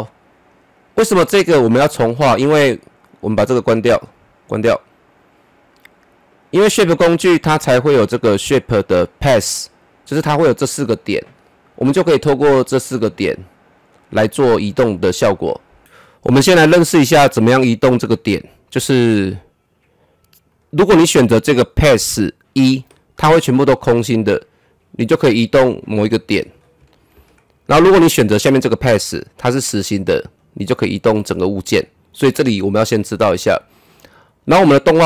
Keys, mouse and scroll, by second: 3.4 click, 10.5 click, 12.0-12.4 scroll down 1, 12.4 middle click, 13.0-14.1 scroll down 1, 15.8-20.5 drag, 25.3-27.1 drag, 27.1 z, 28.7-33.1 drag, 33.1 ctrl+z.